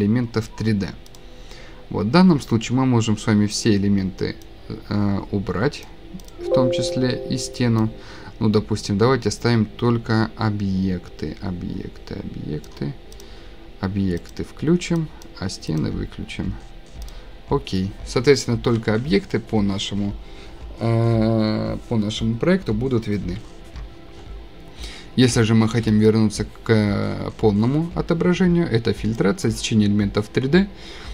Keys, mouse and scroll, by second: 1.2 click, 3.7 click, 5.8 click, 6.3 middle click, 12.6 click, 13.2 click, 14.3 click, 15.2 click, 15.8 click, 17.1 click, 21.8 click, 26.1-28.3 scroll, 29.4 click.